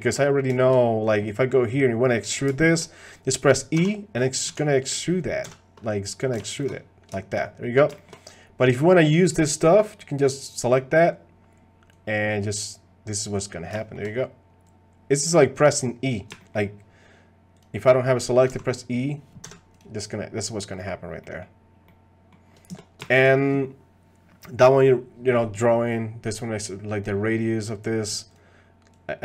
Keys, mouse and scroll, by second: 0.1 click, 0.5 shift+click, 2.2 click, 2.7 shift+click, 3.7 e, 7.4 middle click, 7.9 shift+middle click, 10.7 click, 11.9-13.4 drag, 13.8 shift+middle click, 14.7 click, 16.4 shift+click, 17.6 click, 18.5 e, 20.8 middle click, 21.2 middle click, 21.9 click, 23.0 shift+click, 28.9-29.2 drag.